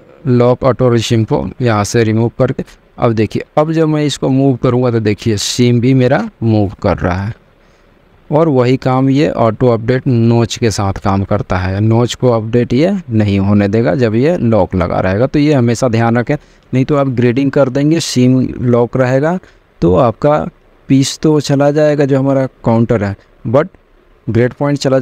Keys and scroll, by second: 7.8 ctrl+z.